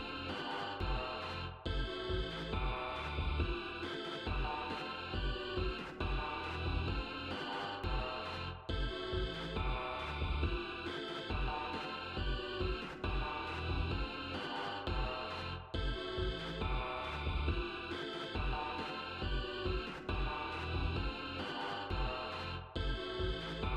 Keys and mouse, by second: 3.0 click, 3.9 1, 4.7 0, 6.2 click, 6.9 BackSpace, 11.0-12.0 typing, 13.9 click, 18.1 click, 20.2 ctrl+z, 22.8 right click.